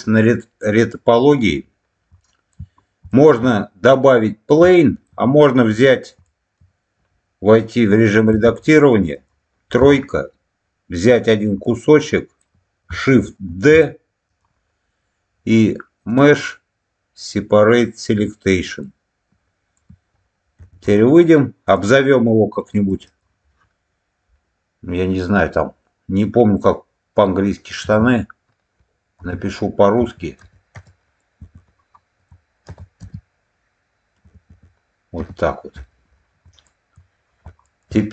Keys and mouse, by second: 2.1 shift+middle click, 3.0 shift+middle click, 4.7 shift+middle click, 6.1 shift+middle click, 8.3 Tab, 8.5 middle click, 9.0 click, 9.7 3, 11.1 click, 11.5 middle click, 13.4 shift+d, 14.2 click, 16.1-18.2 drag, 18.7 middle click, 20.5 Tab, 20.7 click, 21.6 click, 22.8 click, 23.0-35.7 drag, 36.6 shift+middle click, 37.5 shift+middle click.